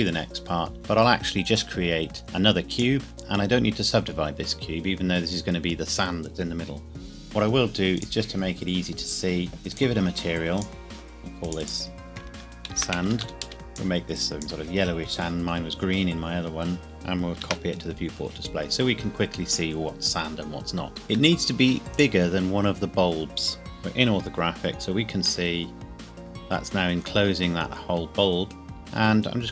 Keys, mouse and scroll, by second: 0.7 shift+a, 2.7 click, 3.1 Tab, 3.5-4.1 scroll up 1, 4.1 scroll down 1, 7.9 click, 8.0 scroll down 1, 9.7 click, 12.7-13.2 typing, 13.5 Return, 13.9 click, 16.8 scroll down 1, 17.4 ctrl+v, 21.1 s, 21.9 click, 24.7 scroll down 1, 25.5 middle click, 28.8 shift+click.